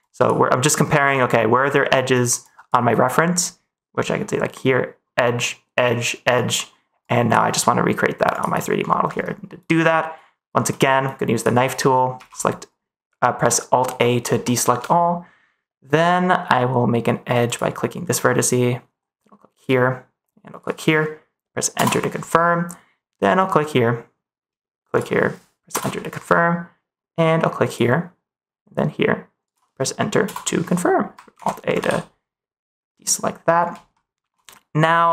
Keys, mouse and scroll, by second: 11.3 click, 12.1 alt+a, 14.4 middle click, 17.4-21.7 drag, 23.3-25.6 drag, 27.6-30.2 drag, 31.3 alt+a, 31.8 ctrl+s, 33.9 middle click.